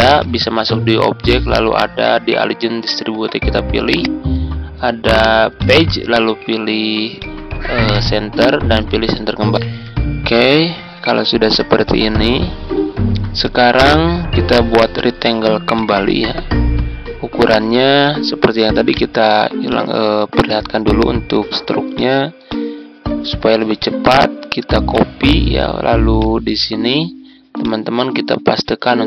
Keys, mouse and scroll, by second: 18.8 right click, 19.6 click, 27.1 click.